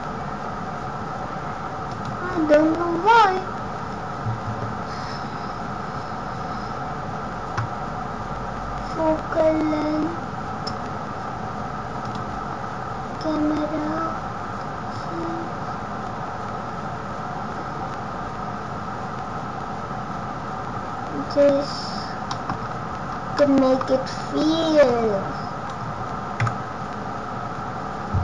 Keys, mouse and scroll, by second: 2.6 scroll up 1, 4.5 scroll up 1, 5.5 scroll up 3, 9.7 scroll down 1, 12.0 click, 12.4-13.0 scroll down 3, 15.0 click, 22.3 middle click, 22.5 scroll down 4, 23.2 scroll down 5, 23.3 middle click, 23.8 scroll down 3, 24.8 click, 26.3 KP_0.